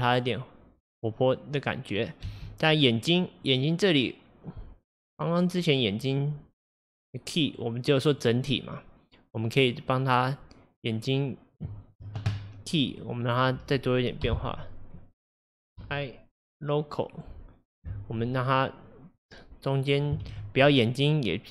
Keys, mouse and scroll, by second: 2.3 space, 3.5-6.8 drag, 11.9 shift+click, 13.1-17.3 drag, 19.2-20.3 drag, 20.3 shift+d.